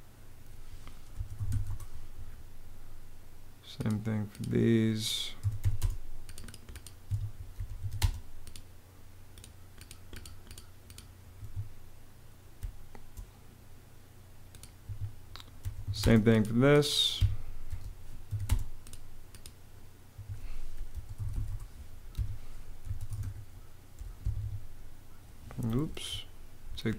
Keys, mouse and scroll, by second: 0.6-1.7 typing, 4.8-5.8 typing, 6.7 Escape, 7.0-8.0 typing, 11.0 Escape, 12.2 space, 14.5 Escape, 15.0-16.0 typing, 16.8 Escape, 17.4 m, 18.0 a, 18.1 space, 19.8 Escape, 20.4-23.6 typing, 21.8 Escape, 23.9 Escape, 25.5 super+z, 26.6 super+z.